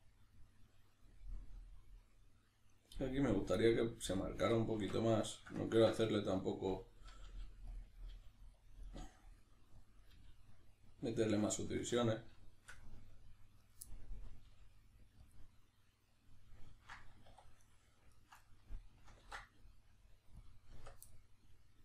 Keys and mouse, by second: 4.2 right click, 4.8 alt+q, 5.3-7.2 shift+middle drag, 7.2 g, 7.8 click, 8.0 right click, 8.1 g, 8.6 click, 8.8 right click, 9.0 g, 9.8 click, 10.0 right click, 10.1 g, 10.8 click, 11.6-13.6 middle drag, 13.6 right click, 13.8-17.6 middle drag, 14.5 g, 15.4 click, 17.3 2, 17.6 right click, 18.1 ctrl+right click, 18.4-21.8 middle drag, 19.2 ctrl+e, 20.8 Tab.